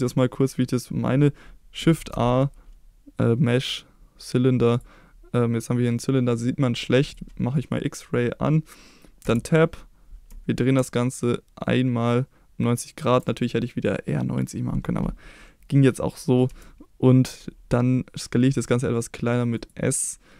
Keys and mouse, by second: 1.9 shift+a, 7.0 click, 9.2 Tab, 10.2 r, 12.9 ctrl+click, 16.4 s, 19.5 click, 20.0 middle click.